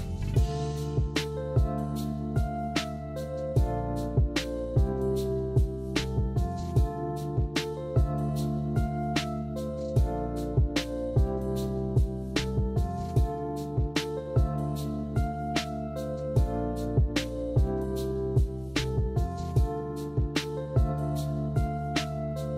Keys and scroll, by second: 1.8 Delete, 3.0 Delete, 4.1 ctrl+z, 5.5 b, 6.6 a, 14.9-15.8 typing, 22.3 m.